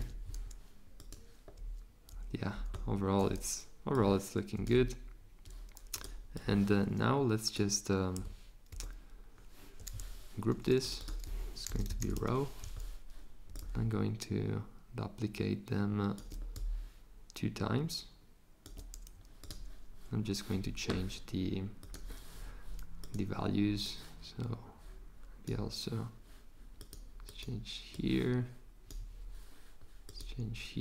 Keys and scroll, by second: 4.7 z, 8.7 g, 11.4-12.5 typing.